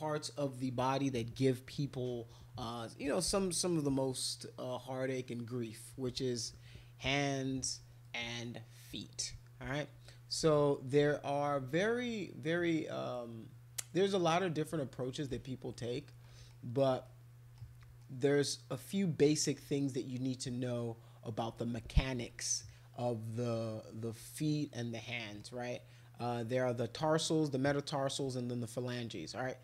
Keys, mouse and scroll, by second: 8.0-10.1 drag, 10.5 alt+click, 13.1-15.3 right drag, 16.2 middle click, 17.0 middle click, 18.0 middle click, 21.5 middle click, 25.0 middle click, 25.6 middle click.